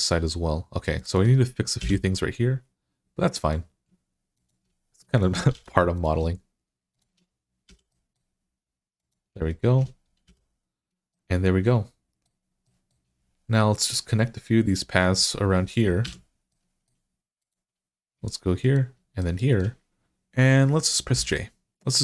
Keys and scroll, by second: 1.6 f, 5.0 f, 5.4 f, 7.5 f, 10.1 f, 15.9 1, 20.9 j.